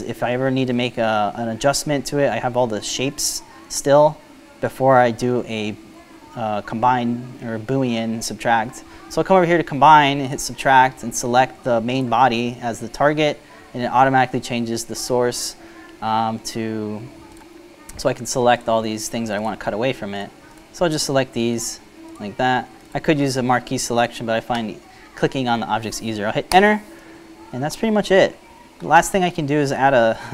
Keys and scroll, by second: 27.0 Return.